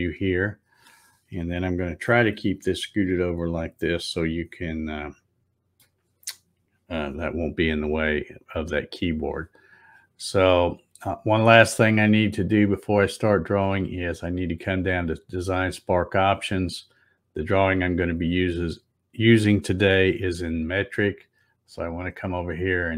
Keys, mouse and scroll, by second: 2.1-5.8 shift+middle drag, 12.4 click, 17.2 click.